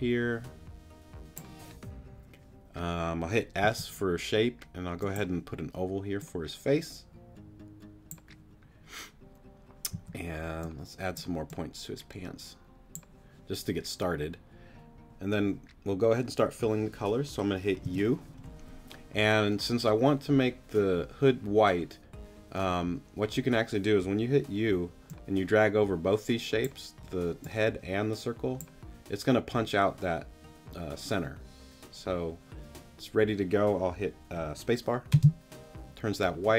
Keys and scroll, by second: 3.6 s, 9.9 a, 17.8 u, 35.1 space.